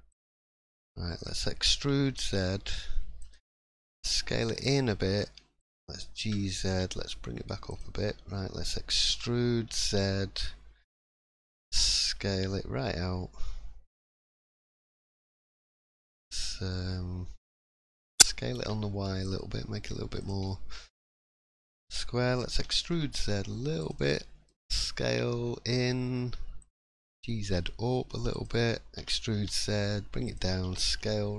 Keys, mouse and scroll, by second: 0.7 middle click, 1.6 e, 8.0 middle click, 9.1 e, 14.8-15.1 scroll down 2, 15.1 middle click, 15.5 scroll up 1, 15.8 middle click, 18.1 s, 20.4 middle click, 21.3 shift+middle click, 21.6 scroll up 1, 22.5 e, 24.0 middle click, 24.6 s, 26.9 g.